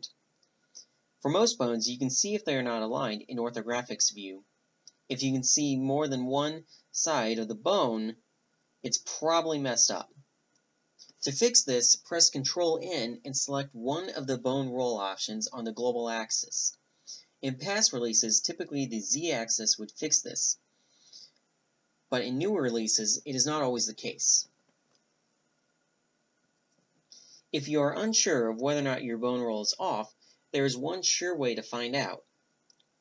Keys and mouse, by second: 0.7 z, 1.6 ctrl+n, 3.1-6.1 drag, 7.9 ctrl+n, 9.1 ctrl+n, 10.2-11.2 drag, 11.8-13.3 middle drag, 13.3 drag, 13.5-15.1 middle drag, 15.3 click, 15.4-17.3 right drag, 17.5 middle click, 17.9 middle click, 20.0-24.1 middle drag, 24.4 click, 24.4 a, 24.6 Tab, 25.3-27.4 middle drag, 27.5-28.8 drag, 31.1-32.8 drag, 32.9-33.0 drag.